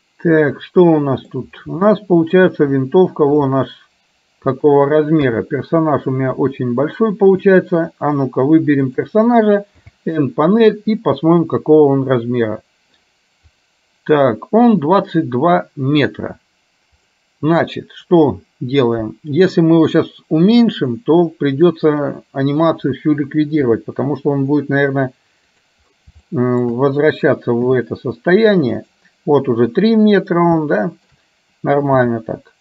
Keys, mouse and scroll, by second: 2.0 shift+middle click, 3.6-4.7 shift+middle drag, 5.4 KP_3, 8.9 click, 9.9 n, 11.4 click, 23.9 s, 26.4 shift+middle click, 27.7 s, 30.7-31.1 scroll up 1, 31.1 scroll down 1.